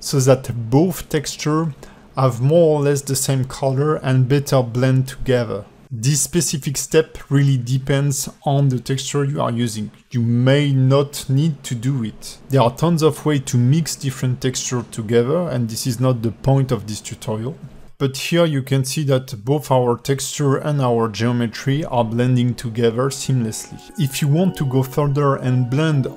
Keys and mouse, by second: 4.5-5.2 alt+drag, 6.4 alt+click, 6.8 alt+shift+middle drag, 7.3-7.6 ctrl+alt+middle drag, 7.7 alt+middle click, 7.9 alt+shift+middle drag, 8.7 click, 10.0 click, 10.6 click, 11.0 click, 16.2-17.5 drag, 17.8 click, 18.7-19.3 alt+middle drag, 19.6 alt+shift+middle click, 20.0 click, 20.2-24.2 alt+middle drag, 25.3 click.